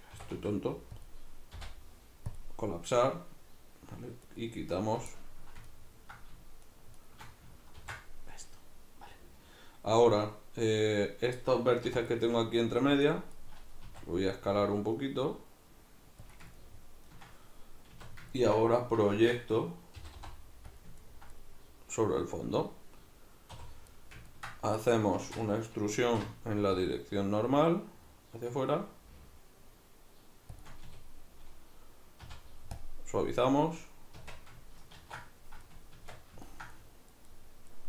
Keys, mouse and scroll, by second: 0.2 e, 1.6 m, 4.2 right click, 5.2-6.6 ctrl+middle drag, 6.6 shift+right click, 7.0 shift+right click, 7.8 ctrl+x, 11.8 1, 12.1 right click, 13.0 shift+right click, 13.4 shift+right drag, 13.8 s, 16.4 click, 16.6-18.0 ctrl+middle drag, 18.0 a, 19.2 shift+Tab, 20.0 middle click, 20.0 g, 20.8 click, 23.5 3, 23.9 middle click, 25.2 shift+Tab, 26.0 alt+e, 30.6 shift+click, 30.8 a, 34.2 Tab, 35.0 ctrl+2, 35.6-37.8 middle drag, 36.0 Tab.